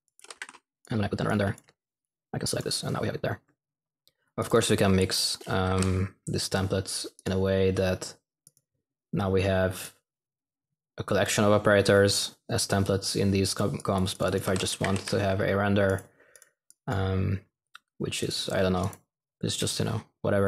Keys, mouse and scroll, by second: 0.0-0.8 typing, 4.3 typing, 5.6 typing, 14.4-15.7 typing.